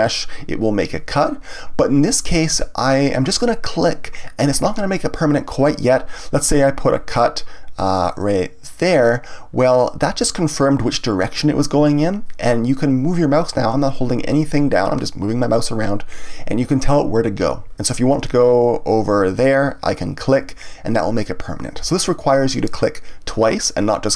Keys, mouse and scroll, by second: 20.3 click.